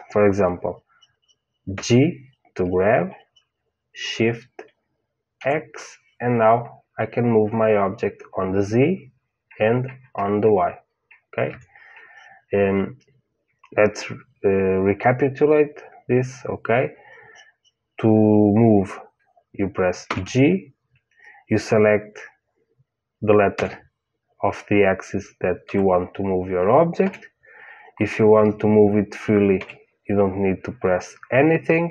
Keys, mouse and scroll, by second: 1.7 g, 20.0 g, 29.5 g.